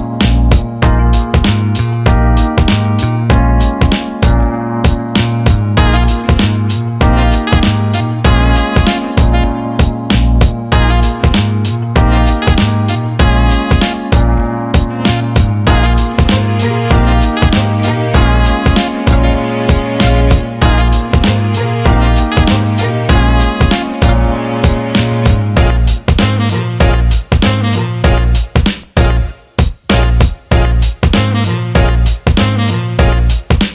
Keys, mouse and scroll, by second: 0.1 click, 0.7 alt+middle click, 1.4 Tab, 2.7-3.7 drag, 4.5 alt+middle click, 5.2 alt+middle click, 7.1 shift+click, 8.7-12.0 shift+drag, 12.7-13.2 alt+middle drag, 13.5 alt+middle click, 16.9-17.2 alt+shift+middle drag, 18.2 click, 18.7 Tab, 19.6 alt+middle click, 21.5 click, 21.8 alt+middle click, 22.6 click, 23.4 alt+shift+middle click, 24.3 ctrl+click, 26.0-28.6 alt+middle drag, 29.3 click.